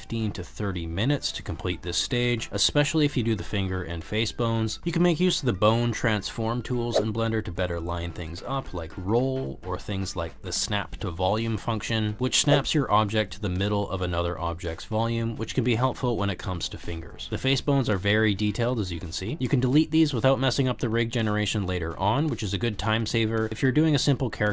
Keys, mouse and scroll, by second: 0.0-1.9 typing, 0.3 click, 0.6 ctrl+z, 2.1 middle click, 2.2 middle click, 2.5 click, 2.6 click, 2.8 middle click, 3.1-7.4 typing, 3.4 click, 3.9 shift+middle click, 4.6 click, 5.2 click, 5.8 click, 6.1 click, 6.4 click, 6.6 click, 6.8 middle click, 7.0 middle click, 7.4 click, 7.6 click, 8.1 click, 9.2 click, 10.0 click, 11.0 middle click, 11.2 middle click, 11.5 middle click, 11.7 middle click, 11.9 click, 12.0 middle click, 12.2 g, 12.4 click, 12.4 y, 12.5 middle click, 12.8 click, 13.0-14.0 drag, 14.2 middle click, 14.8-17.7 typing, 14.9 middle click, 15.2 middle click, 15.9 middle click, 16.8 click, 17.2 click, 18.9 click, 19.2 g, 19.4 click, 21.1 g, 21.6 ctrl+z, 22.0 l, 22.3 g, 22.9 click, 23.3-24.5 typing, 23.8 click.